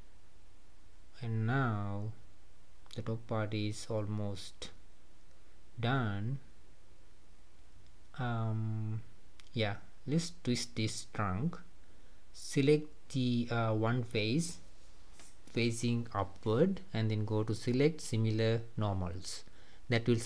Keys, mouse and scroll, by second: 0.5 scroll down 2, 0.7-5.3 middle drag, 9.4 click, 11.0 shift+click, 15.9-18.7 drag, 18.7-20.2 middle drag.